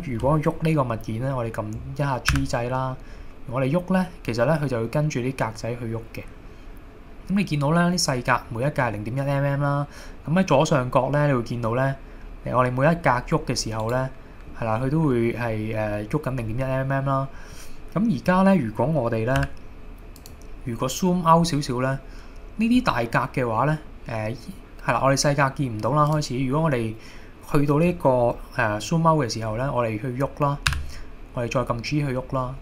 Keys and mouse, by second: 2.3 g, 13.9 right click, 19.4 g, 20.2 click, 30.8 g.